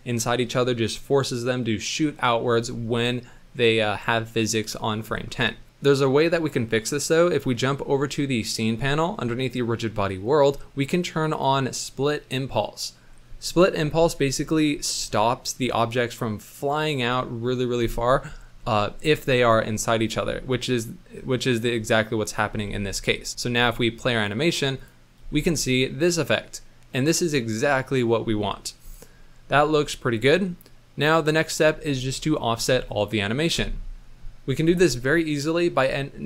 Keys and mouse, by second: 11.3 click, 21.9 middle click, 22.6 space, 23.6 space, 23.7 middle drag, 24.8 click, 25.1 space, 26.3-28.2 middle drag, 28.7 space, 31.3 click.